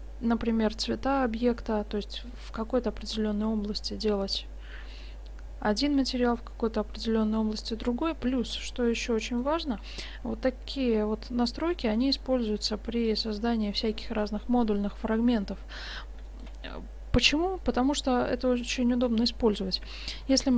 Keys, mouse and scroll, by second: 8.5 shift+z, 15.7-16.5 middle drag, 20.3 shift+d.